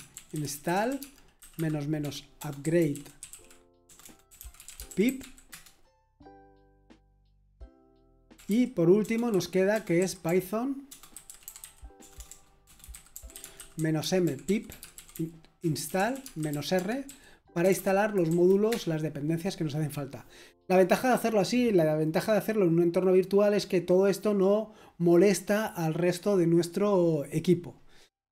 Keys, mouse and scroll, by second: 0.0-5.7 typing, 9.0-18.2 typing, 18.2 Right, 18.7 Return, 19.4 typing.